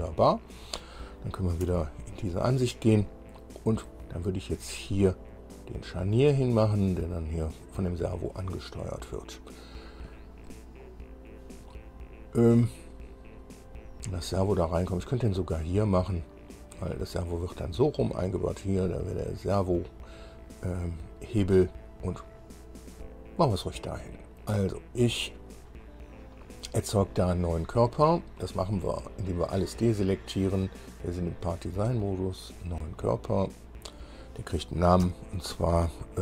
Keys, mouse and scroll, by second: 0.1 middle click, 1.9 KP_1, 28.7 click, 32.8 click, 33.6 scroll down 1, 34.4 click, 35.3 F2.